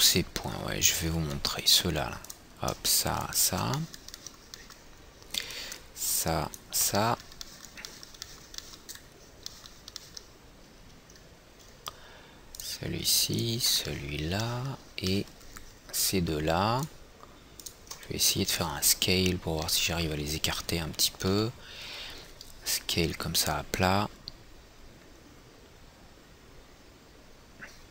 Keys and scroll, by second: 1.5 &, 21.8 e.